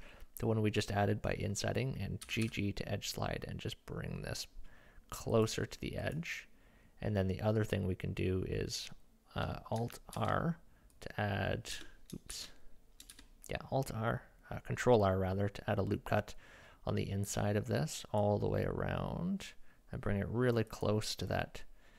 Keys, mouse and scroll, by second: 2.3 g, 6.0 click, 6.1 middle click, 8.2 middle click, 10.1 ctrl+r, 12.3 ctrl+z, 13.1 ctrl+r.